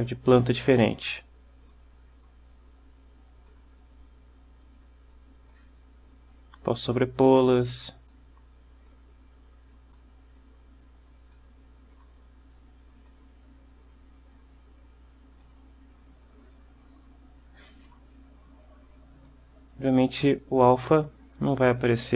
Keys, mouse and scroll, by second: 0.1-1.1 drag, 1.7 click, 2.3 click, 2.8-3.8 drag, 5.2-5.8 drag, 6.2-6.9 drag, 7.0 click, 9.0-10.3 drag, 10.5-11.7 drag, 13.1 click, 14.0-15.7 drag, 16.1-18.2 drag, 19.3 click, 21.1-22.1 drag.